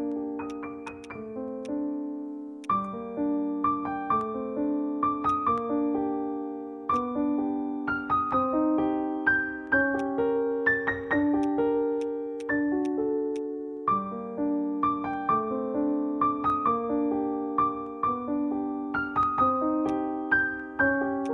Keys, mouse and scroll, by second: 10.0 right click, 19.5-19.8 scroll up 1, 19.9 alt+click, 21.0 alt+middle click, 21.2 alt+click.